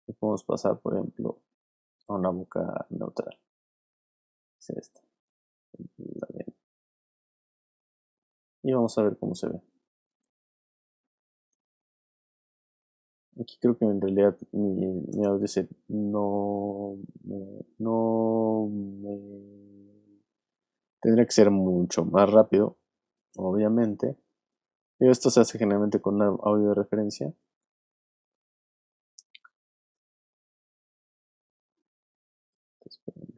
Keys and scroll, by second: 15.1 space.